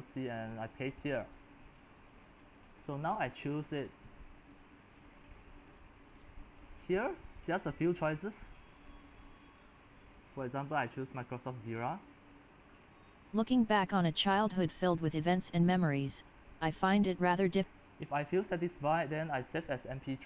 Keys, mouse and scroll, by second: 0.2 click, 0.6 ctrl+v, 1.8-8.6 drag, 11.5-20.2 drag.